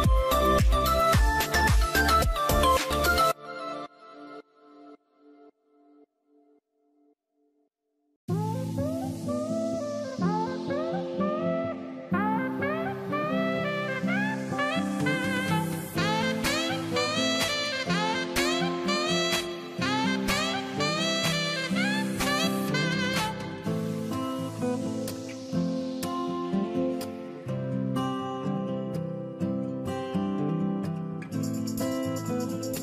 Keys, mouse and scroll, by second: 6.3-8.5 drag, 11.8-13.1 drag, 13.1 scroll down 1, 22.2 double click.